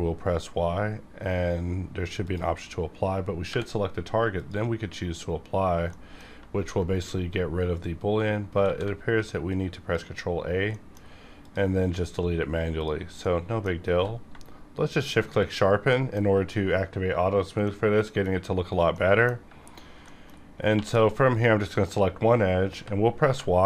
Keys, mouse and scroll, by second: 2.2 click, 3.4 y, 4.3 click, 5.5 scroll down 1, 5.8 middle click, 6.6 ctrl+z, 8.6 ctrl+a, 9.4-10.7 drag, 10.6 middle click, 10.7 middle click, 11.4 click, 11.8 x, 12.0 click, 12.5 scroll up 1, 12.8 click, 13.2 middle click, 13.2 middle click, 13.8 q, 14.9 shift+click, 15.8 middle click, 15.9-19.1 middle drag, 19.2 middle click, 19.6 scroll up 1, 20.0 shift+middle click, 20.4 scroll up 1, 20.7 2, 21.2 click, 22.7 y, 23.2 y.